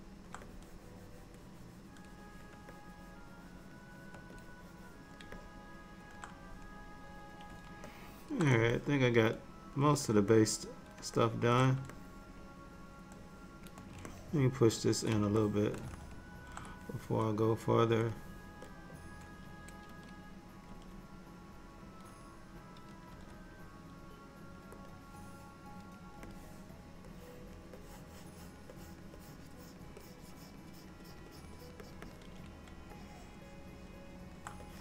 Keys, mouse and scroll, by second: 0.0 middle click, 0.6 click, 2.8 shift+click, 4.4 click, 5.4 middle click, 7.9 ctrl+middle click, 8.8 middle click, 10.4 middle click, 11.2 shift+middle click, 11.6 shift+middle click, 12.0 middle click, 14.1 ctrl+middle click, 15.4 shift+middle click, 16.0 ctrl+middle click, 18.2 click, 18.7 click, 20.0 g, 20.8 g, 23.2 f, 26.4 click, 27.2 click, 27.9 click, 28.8 click, 29.3 click, 29.6 click, 30.1 click, 30.4 click, 30.8 click, 31.1 click, 31.4 click, 31.7 click, 31.9 click, 32.2 click, 33.0 alt+middle click, 34.7 click.